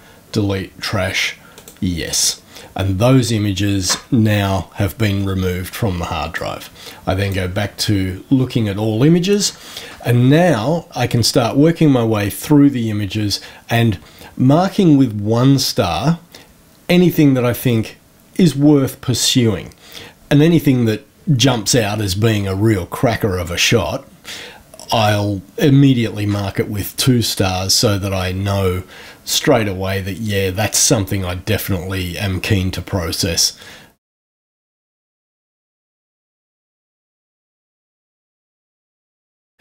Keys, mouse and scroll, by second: 1.5 click, 6.3-7.5 drag, 33.8 Right, 34.1 Right, 34.2 Right, 34.5 1, 34.8 Right, 35.0 Right, 35.2 Right, 35.3 Right, 35.9 Right, 36.0 Right, 36.3 Right, 36.5 Left, 37.0 1, 37.1 Right, 37.4 Right, 37.5 Right, 37.7 Right, 37.9 Right, 38.1 1, 38.3 Right, 38.5 Right, 38.7 Right, 39.0 Right.